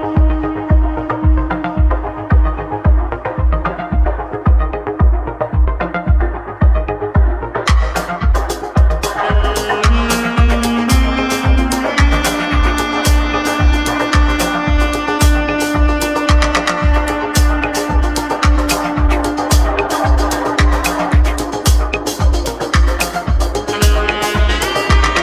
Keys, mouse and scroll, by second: 2.6-3.5 scroll down 4, 3.5-4.0 scroll up 2, 4.0-5.9 scroll down 4, 5.9-7.0 scroll up 5, 7.0-9.0 scroll down 1, 13.7 click, 15.3 Tab, 15.6 click, 17.8-22.9 drag, 20.5-20.8 scroll down 1, 20.8-22.1 scroll up 1, 22.1 shift+s, 22.9 shift+s, 23.9 click, 25.0-25.2 shift+middle drag.